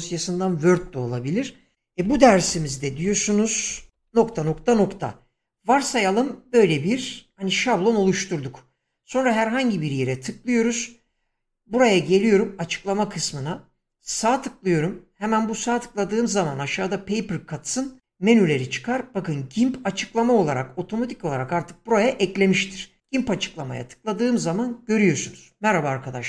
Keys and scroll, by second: 2.0 Caps_Lock, 2.1-5.0 typing, 2.1 Caps_Lock.